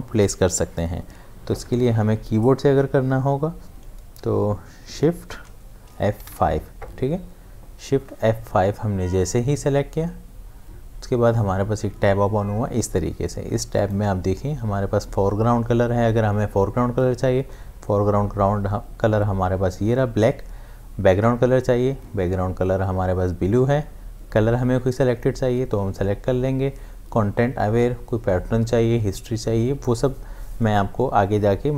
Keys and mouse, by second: 5.4 shift+Num_Lock, 6.2 shift+F5, 13.8 click.